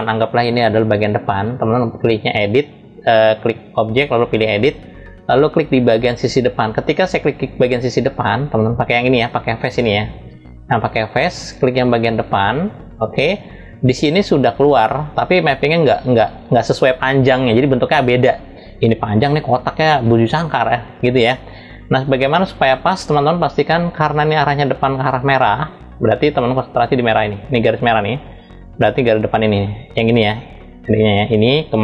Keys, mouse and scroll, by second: 1.9-4.7 drag, 5.8-9.5 drag, 10.0-11.3 drag, 11.7 click, 13.5-14.0 scroll down 4.